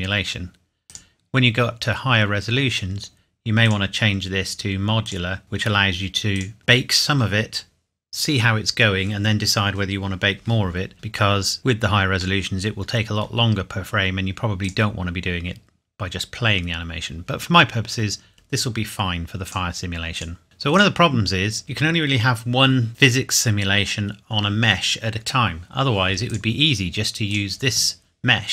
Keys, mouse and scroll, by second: 0.9 click, 3.6 click, 11.1 click, 11.4 middle click, 13.6-14.6 scroll up 1, 14.6 click, 17.2-18.1 scroll up 1, 19.5 click, 26.3 click.